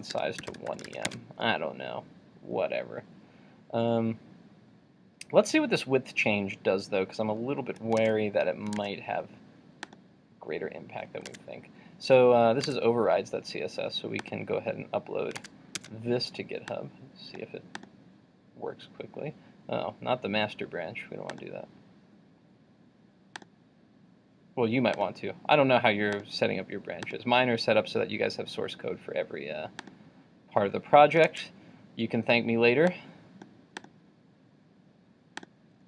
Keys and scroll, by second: 0.9 super+s, 1.2 super+Tab, 8.0 super+Tab, 31.3 super+Tab.